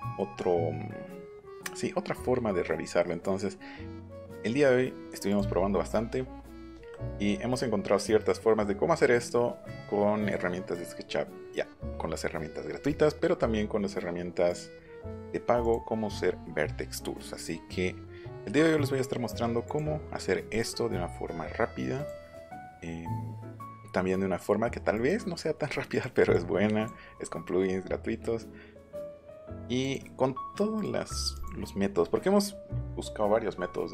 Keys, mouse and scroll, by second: 0.3-1.1 scroll down 8, 2.8 scroll up 2, 5.3 click, 14.5 click, 15.6 click, 17.3 click, 18.3 click, 19.6 click, 20.5 click, 21.3-21.9 scroll down 1, 21.9 click, 24.9 click, 25.9 click, 26.3 click, 29.1 click, 29.8 click, 30.7 click, 31.3 click.